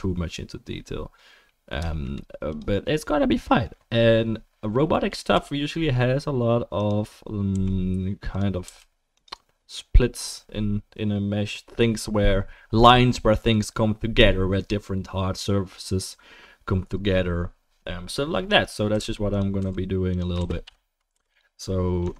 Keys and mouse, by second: 5.3 i, 7.5 e, 8.6 s, 18.9 g, 19.6 s, 20.4 shift+d, 21.1 p, 22.0 Tab.